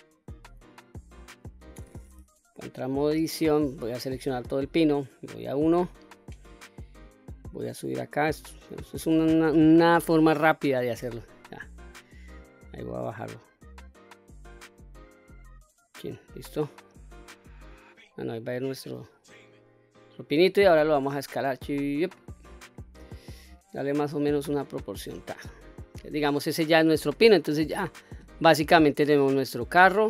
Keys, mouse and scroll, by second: 0.3-0.9 scroll up 3, 3.9 a, 4.9 KP_1, 6.6-9.7 drag, 10.6 Tab, 11.7-15.4 drag, 15.9-16.8 middle drag, 16.8-18.2 scroll down 2, 18.2 click, 19.5 scroll down 1, 20.2 s, 21.6 click, 21.9-22.6 scroll down 4, 22.6 middle click, 23.5 s, 24.6 click, 25.0-25.6 scroll up 2, 25.4 middle click, 26.7 middle click, 29.0 click, 29.5 click.